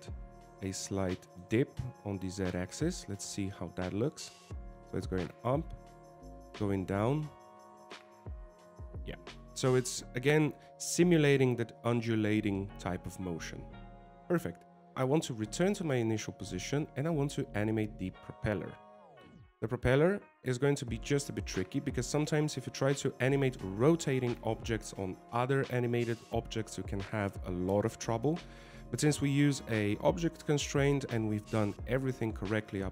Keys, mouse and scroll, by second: 0.5 g, 4.3 click, 5.1 alt+a, 15.1 alt+a, 16.0 click, 16.9 middle click, 18.7 shift+middle click, 19.0 middle click, 19.4 scroll up 3.